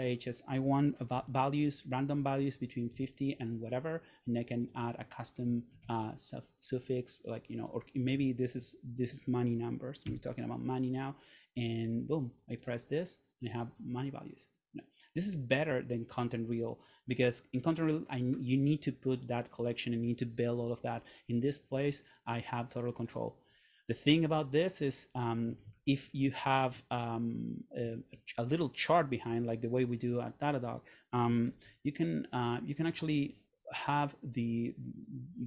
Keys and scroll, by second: 1.2 0, 3.0 Tab, 5.5 Right, 7.8 BackSpace, 8.3 shift+Tab, 10.2 shift+4, 26.0 shift+Return, 31.5 super+/, 32.9 Escape.